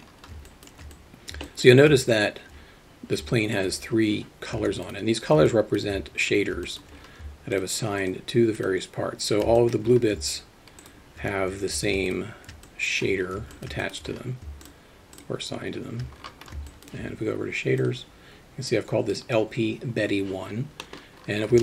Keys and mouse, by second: 0.5 alt+shift+middle drag, 0.9-1.3 alt+middle drag, 1.5 alt+shift+middle click, 1.8 shift+middle click, 2.1 alt+middle click, 3.3 alt+middle click, 5.5 alt+middle drag, 6.7 middle drag, 7.6 shift+click, 8.6 shift+drag, 9.6 alt+middle drag, 12.1 shift+click, 12.7-13.0 alt+middle drag, 13.5 alt+shift+middle drag, 13.8 alt+middle click, 15.2 shift+click, 16.7 alt+shift+middle drag, 17.8 click.